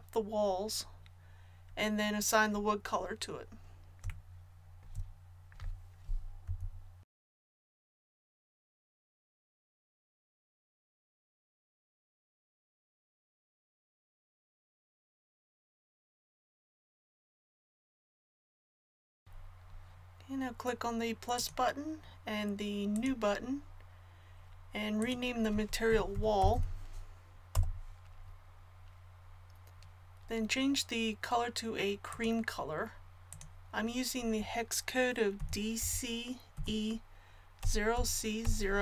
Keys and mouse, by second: 6.4-10.8 typing, 7.3 ctrl+z, 10.2 ctrl+KP_3, 14.4-17.2 drag, 16.4 a, 21.3-26.8 drag, 26.5 l, 32.1-38.8 drag.